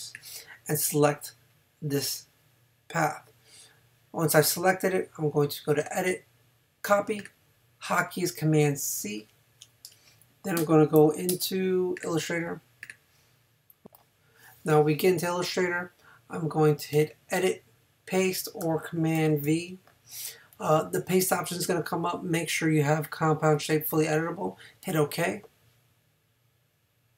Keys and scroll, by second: 9.0 super+c, 11.3 super+Tab.